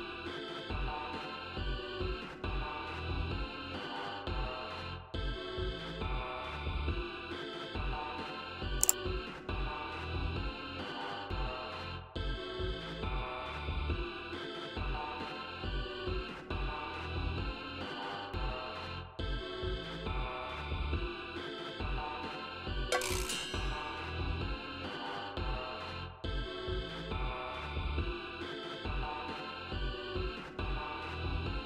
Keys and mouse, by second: 1.9 click, 3.0 click, 3.8 click, 4.6 click, 5.3 1, 7.6 click, 9.0 click, 12.2 click, 13.2 click, 14.0 click, 14.8 click, 16.2 click, 17.0 click, 18.4 5, 18.9 0, 20.1 click, 21.7 ctrl+z, 22.7-23.8 drag, 24.1 click, 26.5 click, 27.6 click.